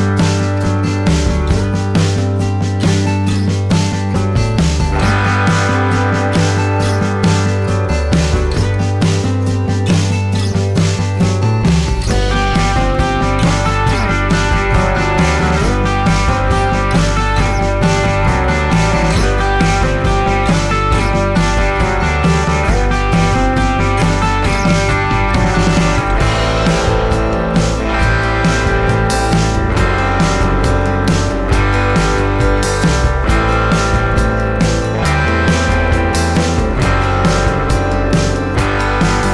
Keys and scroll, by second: 27.9 space.